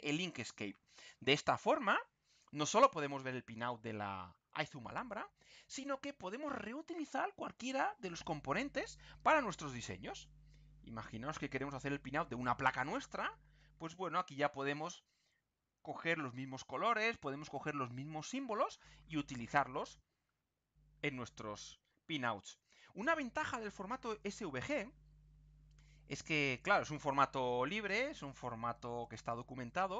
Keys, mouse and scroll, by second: 0.7-1.0 ctrl+scroll down 2, 2.9-3.3 ctrl+scroll down 2, 4.0-4.3 ctrl+scroll up 2, 5.0-5.5 ctrl+scroll up 3, 8.1 click, 16.8 ctrl+scroll down 2, 19.9-20.2 ctrl+scroll down 2, 20.7 ctrl+scroll down 2, 21.3 scroll up 2, 21.9-22.3 ctrl+scroll up 2, 22.4 ctrl+scroll up 2, 24.6 click, 26.1 click, 29.0 click.